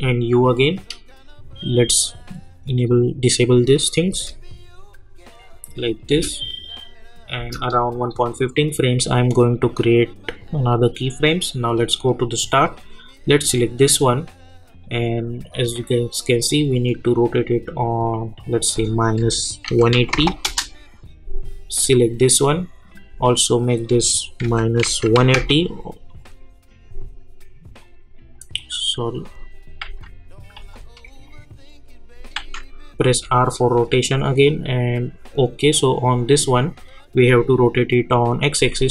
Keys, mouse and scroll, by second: 0.2 scroll down 1, 1.9 click, 4.1 space, 5.3 click, 6.1 space, 7.6-18.8 drag, 19.2 -, 20.4 Return, 21.9 click, 24.4 -, 26.0-29.8 drag, 29.8 ctrl+z, 31.2 click, 32.3 ctrl+z, 33.1 r, 34.4-38.9 drag.